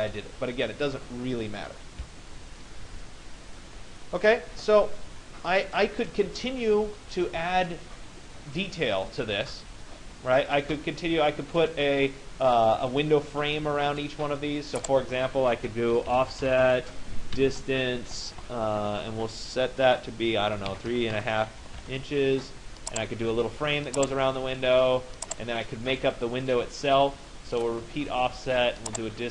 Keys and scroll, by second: 17.6 Return, 20.7 3, 20.9 Delete, 21.2 5, 21.8 Return.